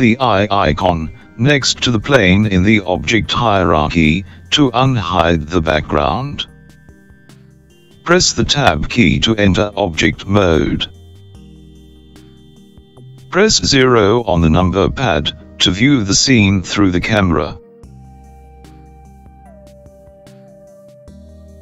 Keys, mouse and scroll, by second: 4.3 click, 8.0 Tab, 9.8-13.5 middle drag, 13.5 KP_0, 15.3-17.9 scroll down 7, 17.9-21.5 scroll up 2.